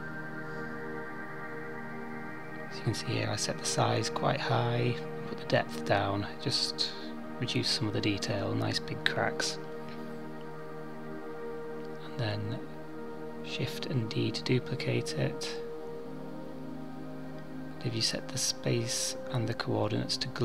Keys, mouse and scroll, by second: 0.8 click, 4.9 KP_7, 6.0-7.3 scroll down 2, 8.0 shift+d, 15.0 click.